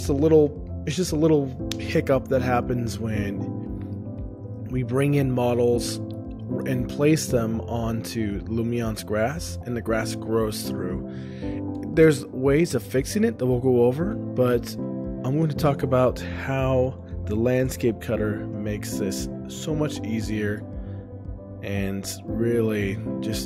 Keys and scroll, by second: 4.3 shift+space, 7.2 ctrl+o, 19.6 shift+space, 21.2 ctrl+o, 22.0 shift+space, 22.9 ctrl+o.